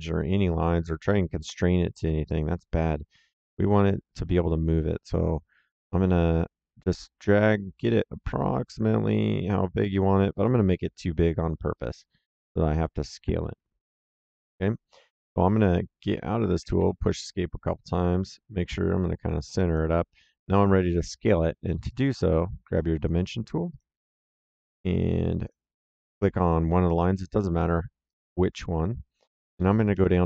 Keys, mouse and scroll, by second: 6.0 click, 16.3 Escape, 17.9 click, 23.6 click, 25.3 click, 28.0 click, 29.7 KP_1, 29.8 KP_Enter.